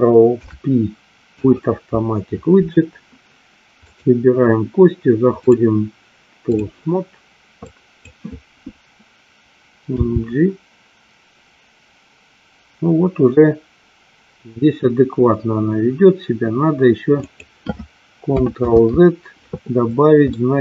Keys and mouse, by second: 0.4 ctrl+p, 4.0 click, 5.6-6.7 drag, 7.9 click, 10.1 g, 18.9 ctrl+z, 20.5 middle click.